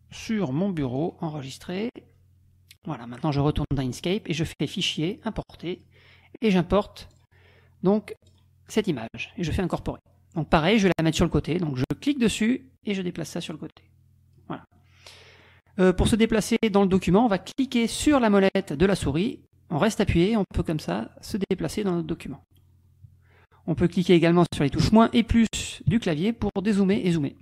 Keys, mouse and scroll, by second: 1.0 click, 1.8 click, 3.7 click, 4.9 click, 5.8 click, 7.1 click, 8.3 click, 9.7 click, 12.3-13.4 drag, 13.6 click, 14.7 click, 18.8-22.8 drag, 24.9 KP_Subtract, 25.2 KP_Add, 25.9 KP_Subtract, 27.0 KP_Add.